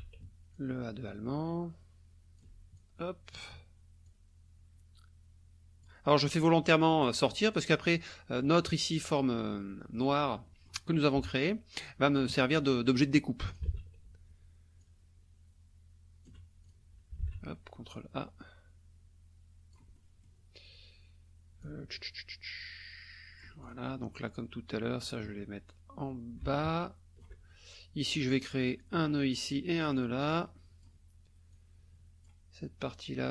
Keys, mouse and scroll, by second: 0.5-2.6 alt+drag, 2.8 alt+click, 4.1-6.0 drag, 7.5 click, 8.4 click, 9.6 click, 10.5 click, 11.2 KP_Subtract, 12.4 click, 13.5 ctrl+click, 13.8 ctrl+a, 14.8-16.4 alt+drag, 16.6 alt+click, 17.9-19.9 drag, 21.6-23.9 alt+drag, 25.0-27.4 drag, 28.2 click, 28.8 click, 29.8 click, 30.3 click, 31.5 click.